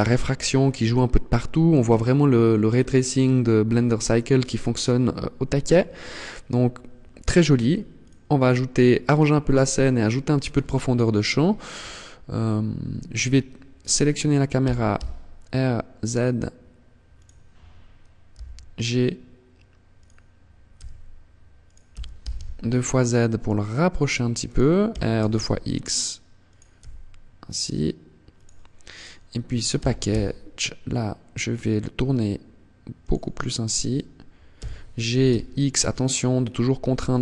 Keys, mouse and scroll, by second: 6.8 click, 9.6-10.2 scroll down 1, 10.2 scroll down 1, 13.0 right click, 13.7 r, 16.3 click, 17.4 g, 19.2 click, 19.8 g, 20.9 click, 21.1 g, 23.7 click, 24.0 r, 25.7 click, 25.9 g, 27.6 click, 28.0 right click, 28.8 r, 32.3 click, 32.8 right click, 33.6 g.